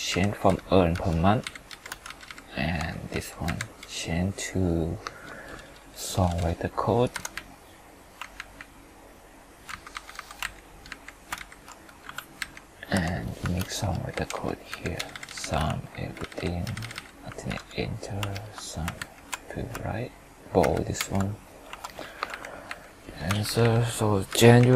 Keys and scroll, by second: 7.2 F2, 8.4 ctrl+Left, 11.4 ctrl+shift+Down, 12.9 F4, 15.9 ctrl+d, 17.5 alt+=, 18.3 ctrl+Return, 19.0 ctrl+shift+Right, 20.6 ctrl+r, 21.0 ctrl+b.